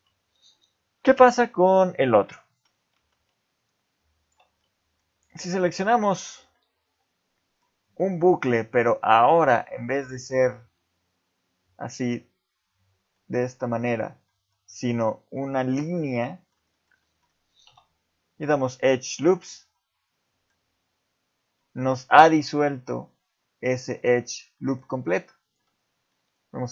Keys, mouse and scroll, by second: 1.1 ctrl+Tab, 3.0 ctrl+Tab, 4.2 alt+click, 4.6 middle click, 5.3 middle click, 6.1 scroll up 2, 6.5 middle click, 8.0 middle click, 10.1 middle click, 13.1 middle click, 14.3 middle click, 16.1 middle click, 16.7 shift+middle click, 17.0 middle click, 17.7 x, 19.7 middle click, 22.5 middle click, 24.0 ctrl+z, 24.5 middle click, 25.4 alt+click, 25.9 scroll down 2, 26.1 middle click.